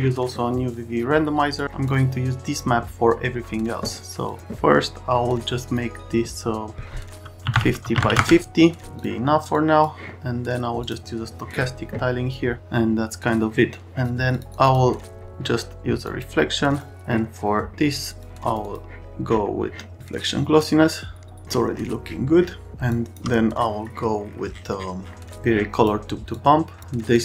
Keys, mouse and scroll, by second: 1.5 click, 4.2 click, 5.6 click, 7.4 KP_5, 7.5 KP_0, 7.8 Tab, 7.9 KP_5, 8.0 KP_0, 8.1 KP_Enter, 9.0 click, 9.5 click, 10.8 click, 12.3 click, 14.3 click, 14.5 click, 14.6 click, 16.0 click, 16.7 click, 18.1 click, 18.4 click, 18.6 click, 20.0 click, 22.9 shift+click, 23.6 right click, 25.3 click, 26.3 click, 27.1 click.